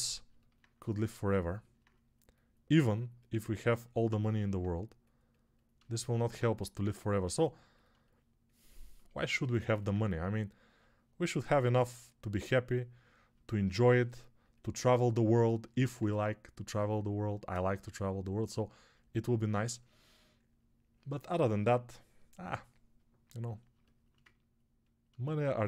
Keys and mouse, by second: 0.1-1.4 ctrl+middle drag, 1.4-23.6 alt+drag, 23.6-25.6 alt+shift+middle drag.